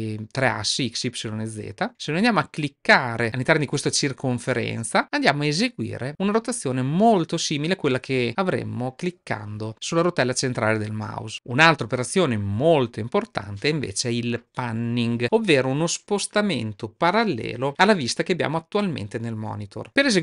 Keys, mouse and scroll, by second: 5.0-11.3 drag.